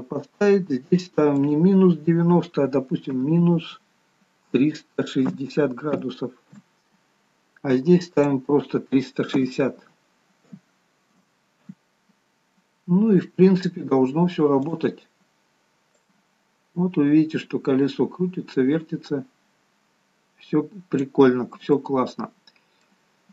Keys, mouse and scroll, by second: 1.5 click, 1.5-3.8 scroll down 4, 8.4 click, 14.2-14.9 scroll down 1, 14.9 click, 16.3 click, 21.4-22.0 scroll down 1, 22.0 middle click, 22.0-23.3 scroll down 3.